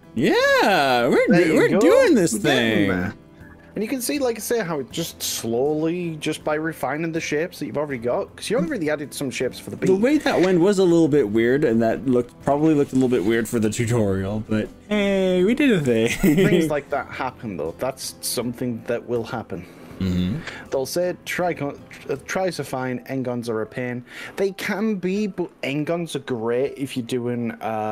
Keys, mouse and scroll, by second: 13.3-22.2 middle drag, 24.1-25.2 drag, 25.4-26.2 scroll down 3, 26.5-27.9 middle drag.